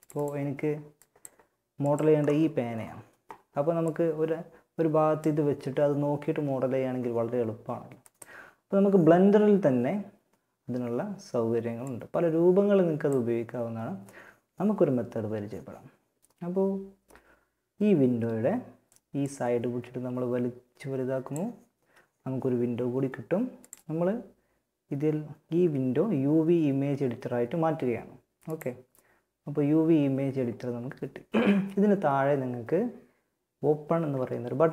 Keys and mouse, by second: 11.0-12.7 drag, 18.4-21.4 drag, 22.7-34.7 drag.